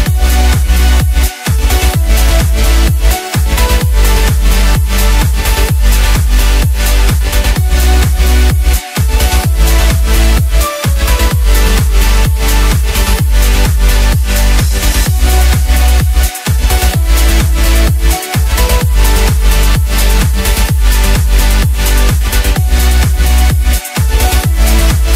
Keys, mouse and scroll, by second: 1.0 KP_1, 1.7-2.4 scroll up 1, 2.5 click, 6.6 click, 6.8 scroll down 4, 7.0-7.7 middle drag, 7.7-8.8 scroll up 1, 8.8 click, 9.7 ctrl+a, 12.5-13.7 drag, 14.0 scroll down 2, 14.3-15.6 middle drag, 15.6 KP_1, 16.4-16.9 scroll up 1, 16.9-18.3 scroll down 1, 23.5-25.1 middle drag.